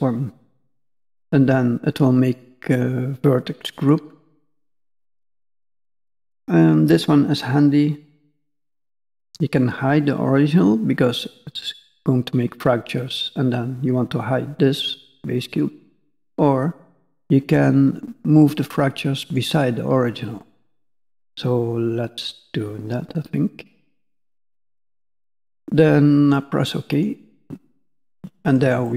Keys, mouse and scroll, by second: 28.0 middle click, 28.8 shift+middle click.